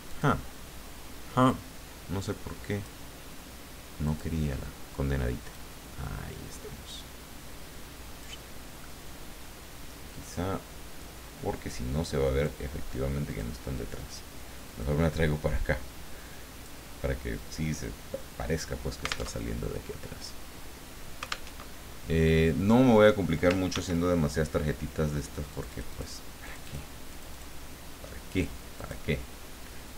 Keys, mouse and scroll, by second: 0.1 click, 1.5-3.1 drag, 4.0 click, 5.5-8.7 drag, 11.0-12.6 drag, 13.3 click, 14.0-15.0 drag, 15.1-17.5 drag, 19.3 alt+Tab, 21.5 alt+Tab, 23.7 ctrl+d, 25.5 click, 26.4 click, 27.1 click, 28.8 click.